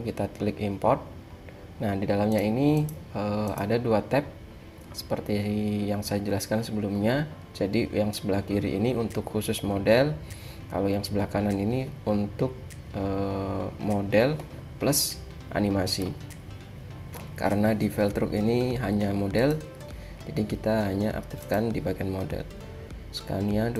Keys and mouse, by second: 0.0-1.4 drag.